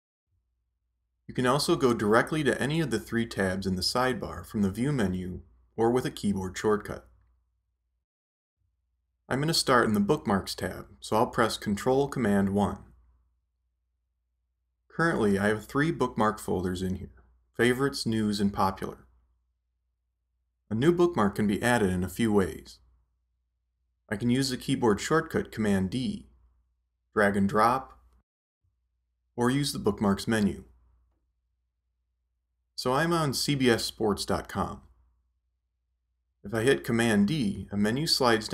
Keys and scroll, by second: 0.8 shift+super+l, 2.6 shift+super+l, 13.1 ctrl+super+i, 37.5 super+d.